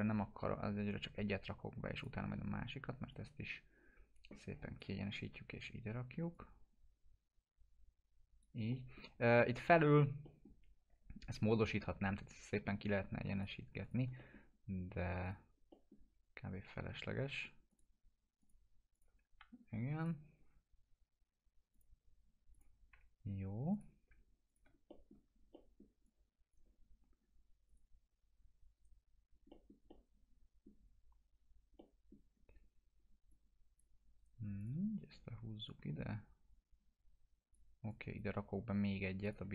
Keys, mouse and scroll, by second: 0.8 right click, 1.9-2.8 typing, 2.0 click, 3.1-4.9 drag, 6.3-8.5 drag, 8.7 middle click, 12.6 middle click, 13.3 click, 14.2 middle click, 15.2 click, 15.7 middle click, 16.1 scroll down 1, 17.7 click, 19.4 F4, 20.0 click, 22.9 F4, 23.7 click, 24.4 shift+click, 24.9 alt+middle click, 26.3-26.7 drag, 28.7 right click, 29.5-30.8 middle drag, 33.3-33.9 click, 34.2 right click, 34.6-37.5 drag.